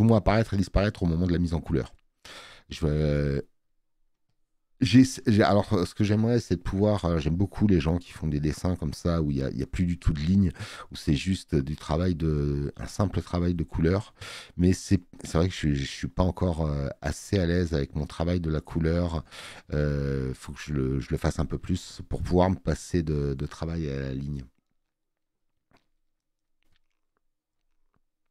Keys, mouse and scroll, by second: 4.3 click.